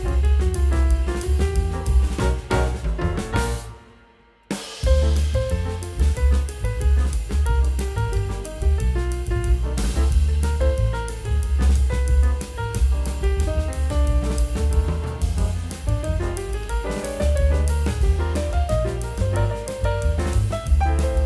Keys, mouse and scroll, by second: 2.5 F10, 3.5 F10, 6.3 double click, 16.7 double click, 18.4 scroll up 1, 19.7-20.1 scroll up 1, 20.2 m.